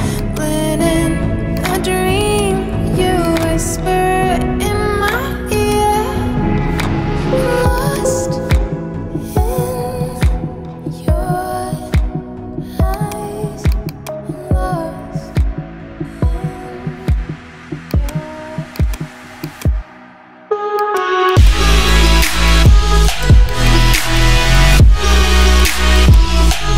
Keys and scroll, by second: 7.1 ctrl+j, 14.4-16.4 typing.